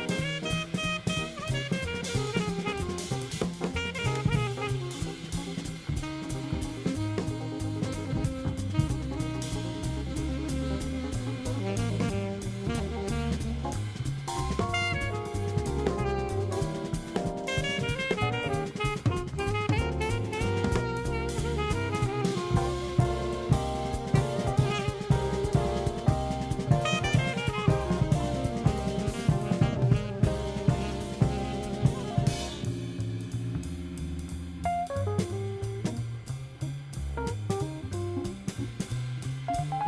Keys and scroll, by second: 6.3 super+c, 7.3 super+f, 8.8 super+7, 23.3 4, 29.4 super+c, 31.1 super+f.